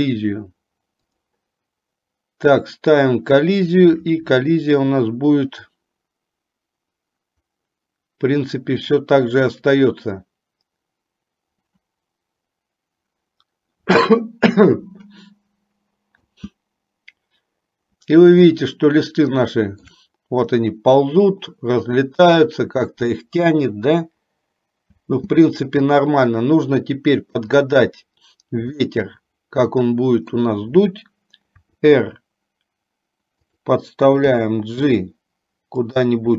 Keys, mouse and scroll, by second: 1.4 click, 16.2 space, 18.9-20.2 shift+middle drag, 25.2 space, 27.6 click, 29.0-30.7 middle drag, 31.9 r, 34.5 g.